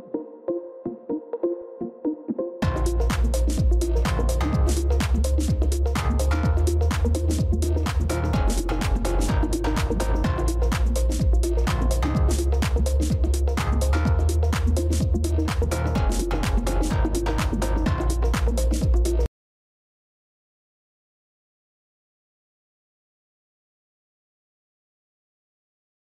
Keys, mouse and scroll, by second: 0.4 right click, 2.2 ctrl++, 2.6 space, 11.2 ctrl+-, 11.4 ctrl+-, 14.5 right click.